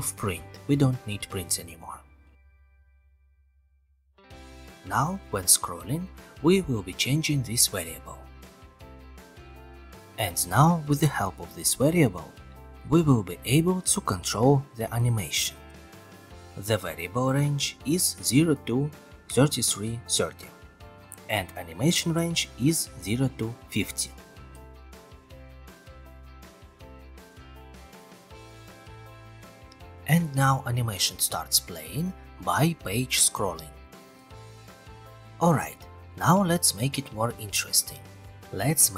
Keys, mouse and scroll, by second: 0.2 click, 1.6 Delete, 3.1 middle click, 4.4 middle click, 8.2-8.9 scroll, 9.0 click, 9.0-9.4 scroll, 11.5 click, 12.3 click, 13.1-14.2 middle drag, 20.1-21.1 drag, 20.2-21.8 typing, 22.2 Return, 23.6-24.1 scroll, 24.3 click, 24.9-25.3 typing, 26.0 click, 26.7 click, 27.5 ctrl+click, 27.7 ctrl+r, 29.0-33.4 scroll, 33.6-35.3 scroll.